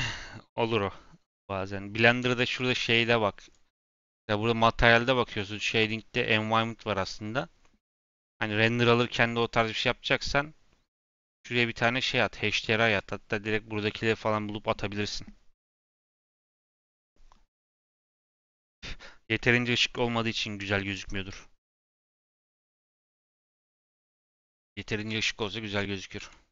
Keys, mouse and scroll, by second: 2.8-9.1 drag, 12.4 click, 23.4 click, 25.1 click.